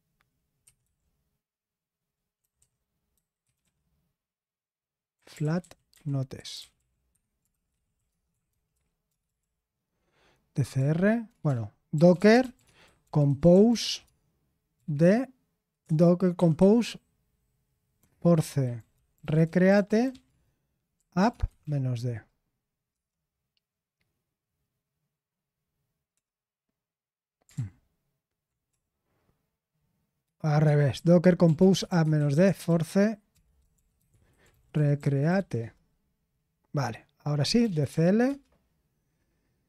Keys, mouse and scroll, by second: 0.4-1.3 typing, 2.4-9.4 typing, 11.0-14.5 typing, 17.7-23.4 typing, 27.5 ctrl+p, 28.7-36.1 typing, 37.3-38.7 typing.